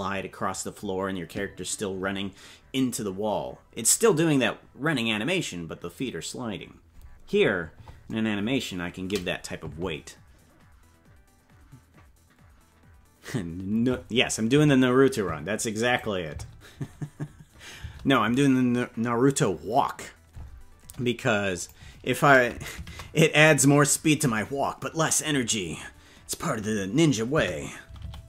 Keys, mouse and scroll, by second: 15.8 click, 16.3 space, 17.8 space.